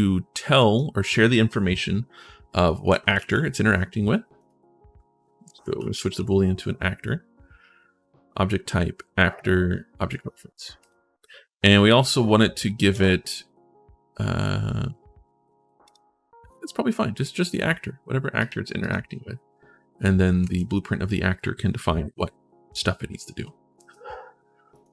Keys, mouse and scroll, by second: 0.4 click, 2.4-3.4 typing, 4.2 click, 5.1-6.5 typing, 10.6 click, 12.7 right click, 15.6 click, 18.1 click, 18.6 click, 20.2 ctrl+shift+s, 23.5 ctrl+shift+s, 24.5 click.